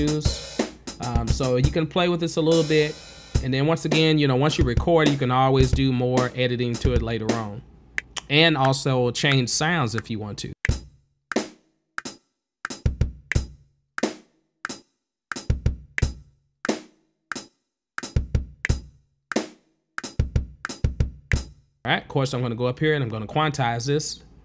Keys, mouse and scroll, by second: 0.0-2.1 typing, 3.3-7.9 typing, 10.4-22.0 typing, 22.6 click, 23.7 click.